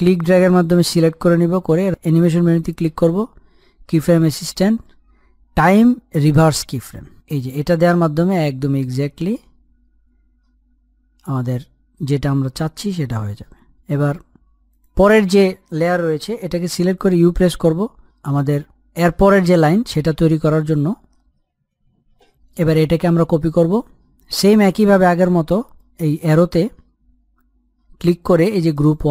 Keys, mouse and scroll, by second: 0.0-3.2 drag, 8.0-16.6 drag, 18.8 u, 19.4-23.8 drag, 27.1 click.